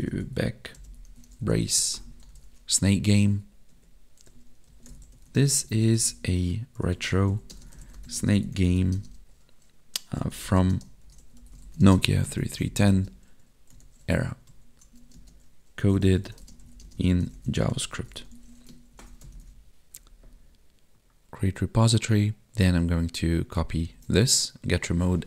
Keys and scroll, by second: 1.7 Right, 3.3 Tab, 5.4 space, 5.7 space, 6.0 space, 7.5 space, 8.2 space, 9.0 space, 10.6 space, 11.8 space, 12.9 space, 15.2 space, 16.4 space, 16.8 space, 18.9 ctrl+Left, 23.9 ctrl+c, 25.0 ctrl+v.